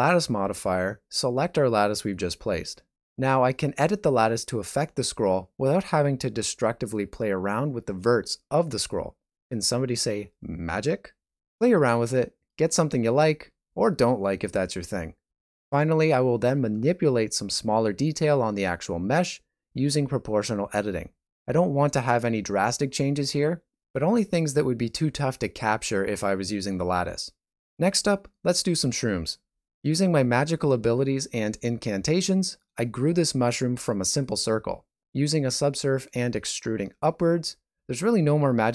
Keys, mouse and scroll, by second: 0.4 click, 2.0 right click, 2.3 Tab, 2.5 middle click, 3.0 click, 3.6 middle click, 4.9 s, 6.8 middle click, 7.4 click, 8.2 shift+click, 9.0 middle click, 10.1 s, 12.9 shift+middle click, 13.2 alt+a, 13.5 Tab, 13.9 alt+shift+z, 14.1 middle click, 15.6 shift+right click, 15.6 g, 16.4 o, 16.6 g, 17.9 middle click, 18.4 shift+middle click, 18.7 g, 21.2 middle click, 22.4 click, 23.1 g, 24.3 g, 25.2 middle click, 25.4 Tab, 25.5 scroll down 3, 25.7 middle click, 26.5 shift+middle click, 26.9 middle click, 27.7 Tab, 28.3 click, 28.7 shift+middle click, 28.9 ctrl+middle click, 29.2 g, 29.8 alt+right click, 29.8 e, 29.8 s, 31.3 alt+right click, 31.8 shift+middle click, 34.3 scroll down 4, 35.4 shift+middle click, 35.8 scroll up 1, 37.4 w.